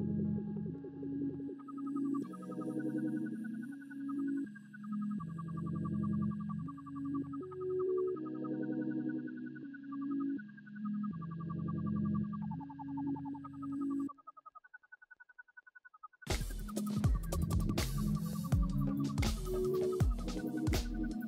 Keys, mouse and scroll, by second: 13.0 double click, 19.9-20.2 scroll up 2, 20.2 right click, 21.1-21.2 scroll down 2.